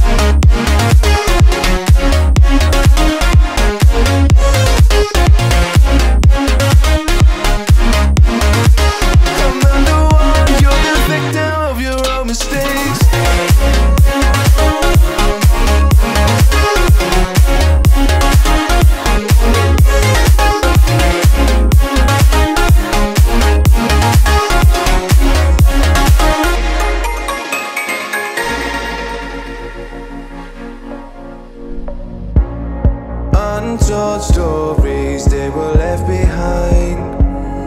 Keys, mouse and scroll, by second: 1.2 shift+click, 2.6 alt+m, 4.1 ctrl+z, 5.2 click, 8.8 b, 13.6 alt+m, 14.1 middle click, 14.8-16.3 scroll up 3, 16.3 click, 21.7 shift+click, 23.4 alt+m, 24.2 scroll down 1, 26.1 click, 26.8-28.0 middle drag, 28.0-29.1 scroll up 2, 29.1 click, 29.9-30.5 scroll up 3, 30.5 middle click, 30.9-31.5 scroll down 8, 31.5 middle click, 31.9-33.5 scroll up 9, 33.5 click, 34.8-35.9 drag, 35.9-36.4 scroll up 2, 36.4-36.7 scroll down 1, 36.7-37.1 middle drag, 37.1-37.6 scroll down 7.